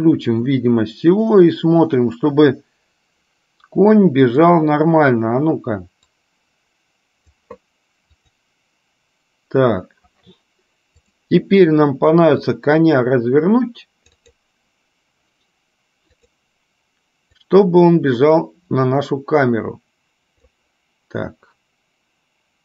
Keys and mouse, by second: 6.4-7.6 drag, 8.5 click, 11.1 click, 12.5 click, 12.9-14.6 drag, 16.4 click, 17.7-20.9 drag.